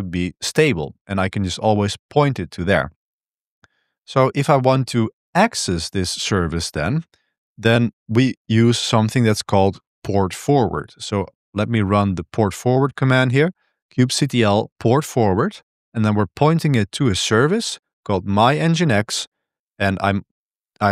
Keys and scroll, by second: 6.1 ctrl+b, 6.3-12.2 typing, 10.3 ctrl+b.